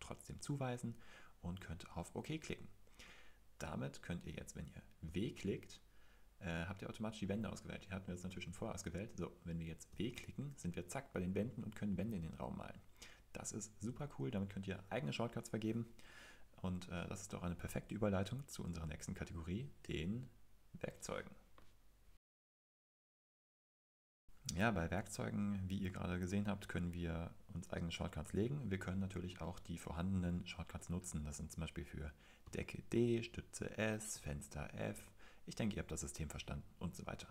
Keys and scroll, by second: 5.0 typing, 7.5 Home, 9.9 w, 24.3 typing, 29.0-29.7 typing, 32.4-34.1 typing, 37.1-37.3 typing.